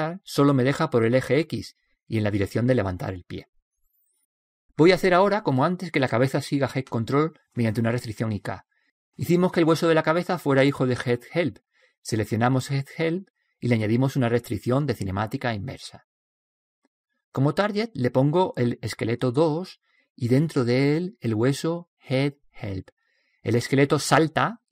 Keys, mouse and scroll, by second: 0.7-2.6 drag, 4.8-6.5 drag, 6.2-9.9 middle drag, 9.9-10.6 scroll up 1, 10.6-11.9 middle drag, 11.9-13.1 scroll down 1, 13.1-15.1 right drag, 14.6-16.4 drag, 18.3-20.1 drag, 20.6 click.